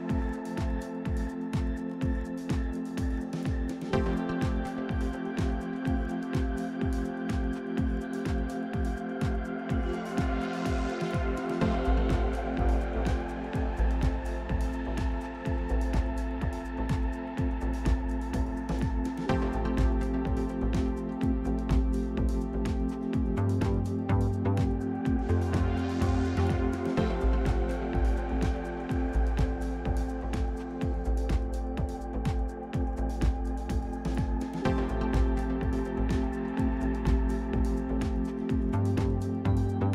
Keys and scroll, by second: 0.0-0.8 typing.